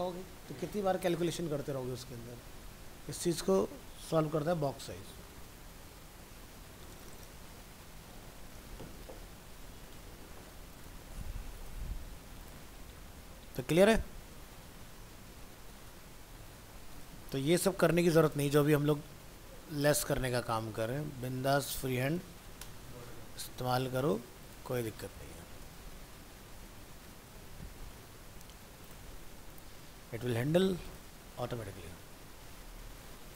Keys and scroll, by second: 11.0 alt+Tab, 15.8 ctrl+shift+Left, 23.0 ctrl+s, 26.7 ctrl+s, 27.3 alt+Tab, 31.5 ctrl+w.